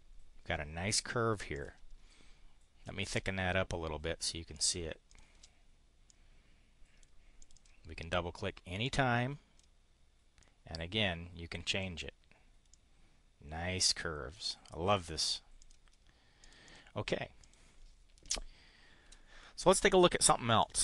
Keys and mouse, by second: 1.4 click, 3.2 click, 4.6 click, 5.1 click, 6.1-7.1 drag, 7.4 click, 8.8 click, 10.4-11.8 drag, 12.7-15.4 drag, 15.5 click, 16.4 click, 16.6 click, 17.2 click, 19.0 Delete, 20.6 click.